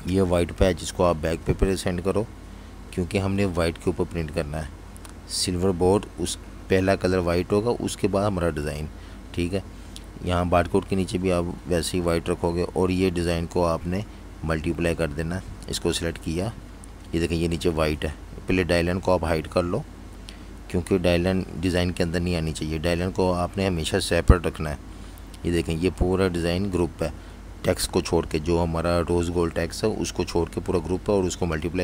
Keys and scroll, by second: 5.4 alt+super+3, 7.5 super+3, 9.4 shift+super+], 10.0 alt+super+3, 11.4 typing, 15.1 super+3, 18.0 shift+super+], 21.2 shift+super+], 21.8 alt+super+3, 26.1 super+z.